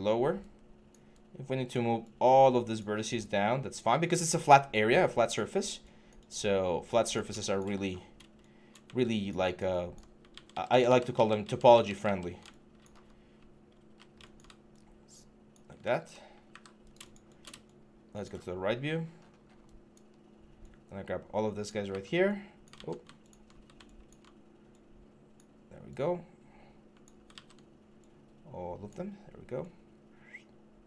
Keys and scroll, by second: 7.6 6, 10.1 ctrl+z, 13.6 ctrl+z, 16.3 w, 17.3-18.0 w, 19.9 4, 22.5 ctrl+z, 27.1 ctrl+z.